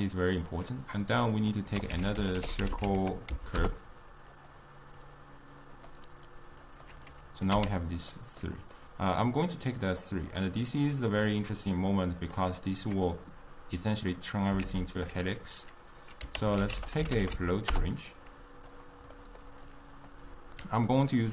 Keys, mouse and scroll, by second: 6.0-8.9 drag, 8.9-21.3 middle drag.